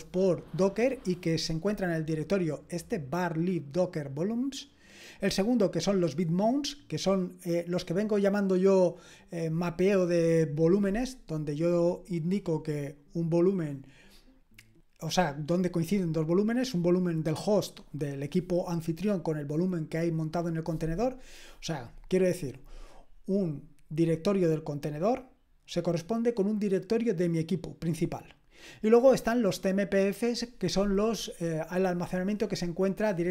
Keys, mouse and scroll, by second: 3.2-6.6 drag, 14.8 click.